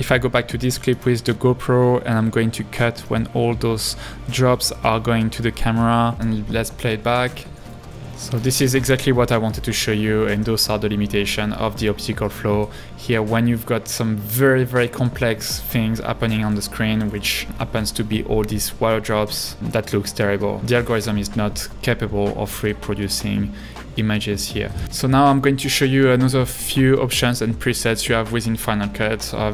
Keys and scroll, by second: 3.1 b, 5.5 b, 6.2 space, 15.5 h, 17.2 super+-, 18.5 space.